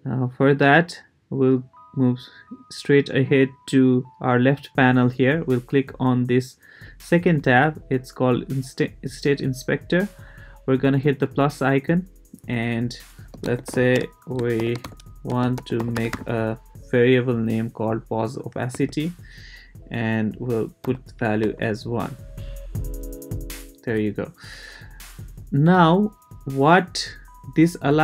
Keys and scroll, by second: 13.1-16.6 typing, 18.7 Tab, 20.8 l, 21.4 Return.